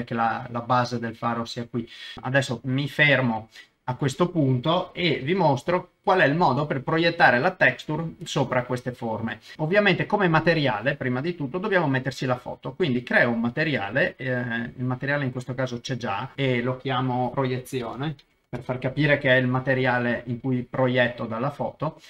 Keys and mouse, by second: 5.2 alt+z, 5.7 shift+middle click, 9.5 click, 11.7 click, 17.3-19.2 drag, 21.6 middle click.